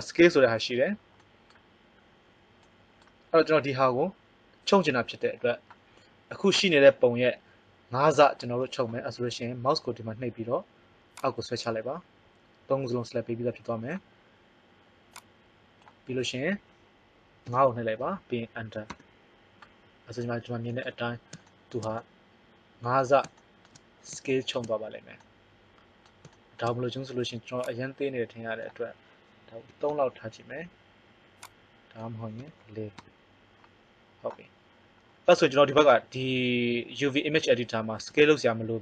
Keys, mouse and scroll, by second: 20.3-21.4 middle drag, 37.9 s.